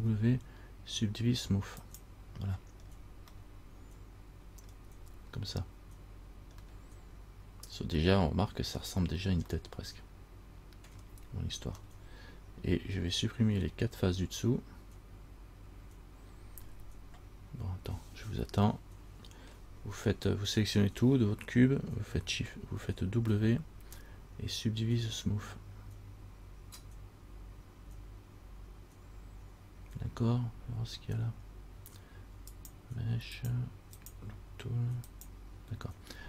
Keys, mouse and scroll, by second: 0.2 w, 3.1 scroll down 2, 3.6 middle click, 4.8 scroll down 1, 7.0 middle click, 7.0 scroll up 1, 9.7 middle click, 11.1-11.9 scroll down 1, 12.0 middle click, 18.9 scroll up 1, 19.0 middle click, 19.7 scroll down 1, 23.5 w, 32.7 click, 33.5 click, 34.1 click, 35.3 click.